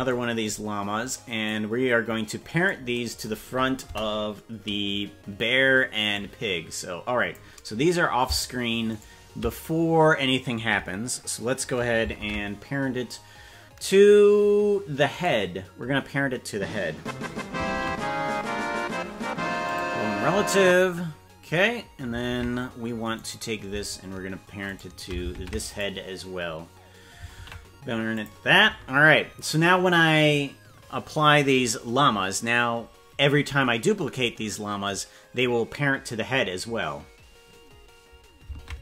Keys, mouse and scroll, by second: 1.4-2.7 drag, 3.8 KP_0, 6.1-7.3 drag, 8.9 shift+right click, 12.2 ctrl+Tab, 15.2 right click, 17.8 ctrl+p, 22.4 ctrl+Tab, 23.2 right click, 24.7 shift+right click, 25.3 ctrl+Tab, 25.8 right click, 27.4 ctrl+p, 38.7 ctrl+Tab.